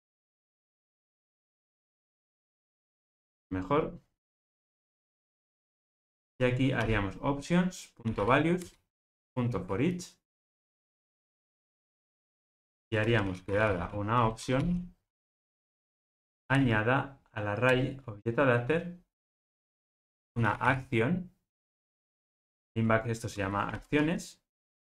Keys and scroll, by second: 8.6 Return, 17.7 Return, 20.4 Return, 22.3 Return.